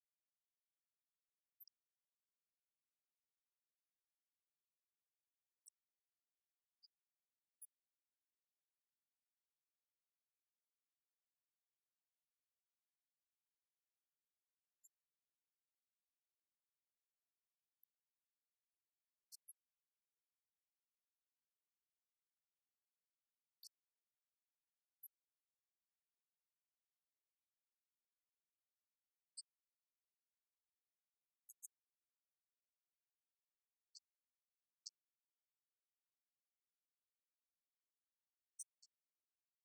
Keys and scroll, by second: 0.0 ctrl+Right, 1.2 ctrl+Right, 4.7 ctrl+Left, 17.2 ctrl+z, 35.9 ctrl+Down.